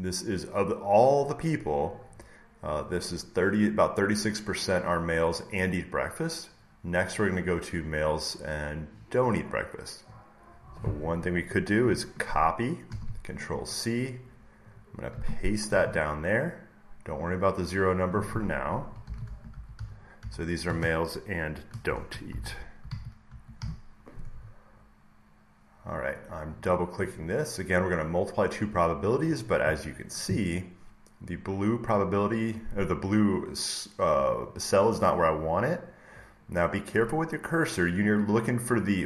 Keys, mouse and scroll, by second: 7.8 click, 8.9 click, 10.0 click, 12.8 ctrl+c, 14.7 click, 15.5 ctrl+v, 17.3 click, 17.8 click, 18.7-24.0 typing, 25.9 click, 26.5 click, 26.6 click.